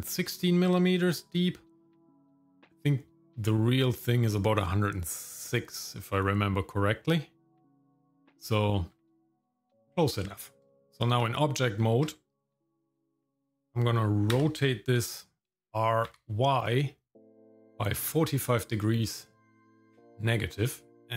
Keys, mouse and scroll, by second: 10.7 shift+middle click, 10.8 Tab, 10.8-11.2 scroll down 1, 11.8 Tab, 14.3 r, 21.0 shift+middle click, 21.0 scroll up 1.